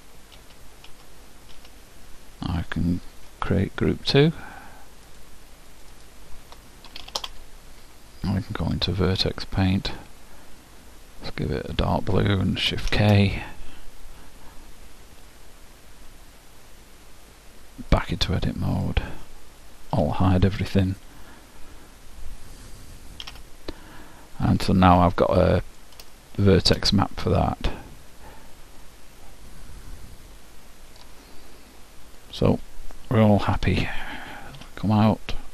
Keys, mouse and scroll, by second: 0.0-1.7 typing, 4.2-8.0 drag, 9.9 click, 11.3-13.0 drag, 13.0 shift+k, 19.1 click, 20.1 alt+h, 23.4 a, 24.0-28.5 middle drag, 28.9-30.8 middle drag, 33.7 Tab.